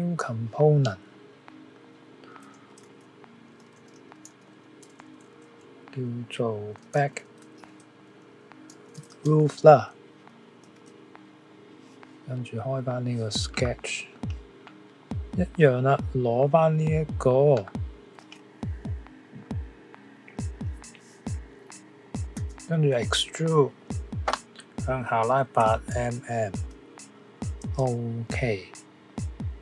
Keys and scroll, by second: 2.8-7.3 typing, 14.9 typing.